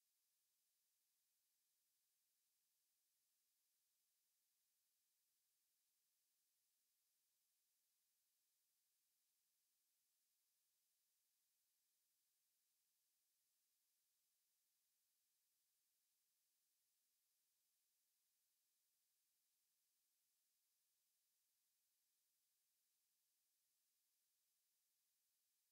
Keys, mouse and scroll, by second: 16.3-17.2 drag, 19.7 click, 23.5-25.5 drag.